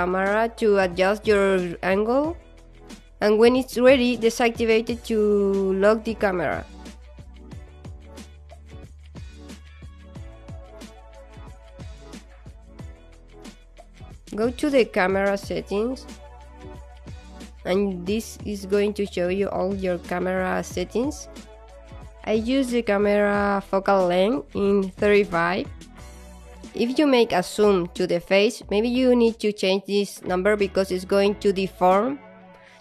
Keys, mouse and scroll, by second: 0.5 alt+click, 4.5 scroll down 1, 6.7-7.0 scroll up 9, 7.6-8.4 scroll up 10, 8.4 click, 9.8-10.5 scroll up 5, 11.6 click, 12.4 click, 15.3 scroll down 1, 16.0 alt+click, 17.0 alt+middle click, 23.4 alt+click, 24.5 alt+middle click, 25.5 click, 26.1 alt+middle click, 26.6 alt+click, 28.7 alt+middle click, 29.7 alt+right click, 30.8 alt+click.